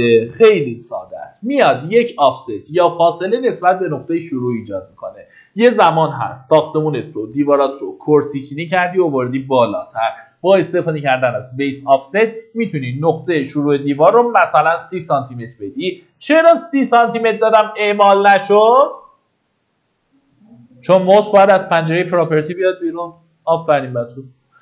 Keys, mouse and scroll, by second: 12.3 click, 14.0 KP_3.